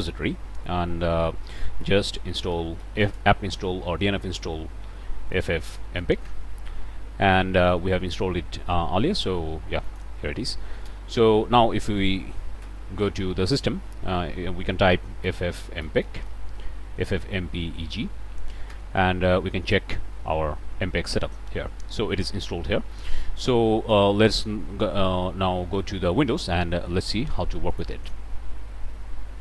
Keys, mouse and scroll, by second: 1.7-3.0 typing, 5.2-5.9 typing, 6.2 Return, 9.8 click, 10.8 ctrl+c, 12.6 ctrl+d, 15.2-16.2 typing, 18.6 Return, 19.9 middle click, 19.9 scroll up 2, 20.7-21.2 scroll up 1, 22.9-24.1 drag, 27.7 click.